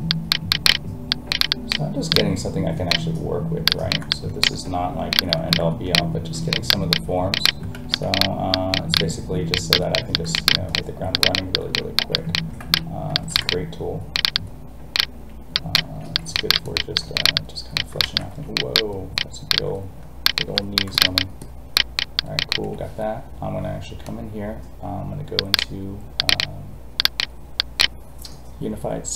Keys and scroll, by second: 7.7 ctrl+z, 12.6 ctrl+z, 18.0 ctrl+z.